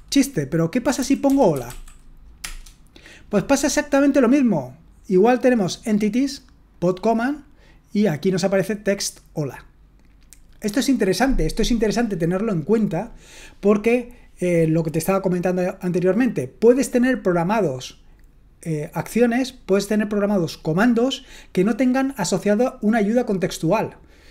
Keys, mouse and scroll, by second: 1.2-2.1 typing, 2.4 Return.